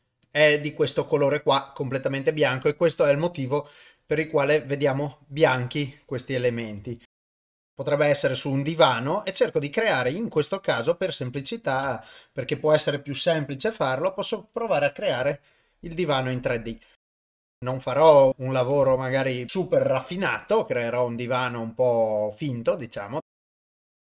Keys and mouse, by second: 0.2 click, 4.1 s, 6.8 s, 7.3 g, 7.4 s, 9.5 KP_0, 9.8 middle click, 10.5 shift+middle click, 11.4 shift+middle click, 12.2 Tab, 13.7 3, 13.8 click, 15.2 e, 16.7 click, 17.1 e, 17.4 middle click, 17.7 KP_0, 18.8 Tab, 21.9 ctrl+2, 22.0-23.2 middle drag, 23.3 click, 23.4 middle click, 23.7 Tab, 23.7 middle click, 24.0-24.2 typing, 24.1 middle click.